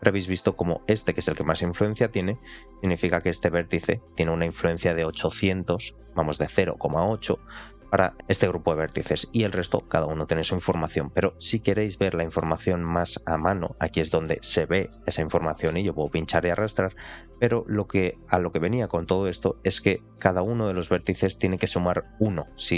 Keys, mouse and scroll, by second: 2.0 scroll up 2, 2.4 shift+middle click, 2.9 scroll up 1, 8.9 click, 9.4 click, 10.0 click, 10.9-11.4 scroll down 3, 11.4 shift+middle click, 19.6 scroll up 2, 20.0 shift+middle click.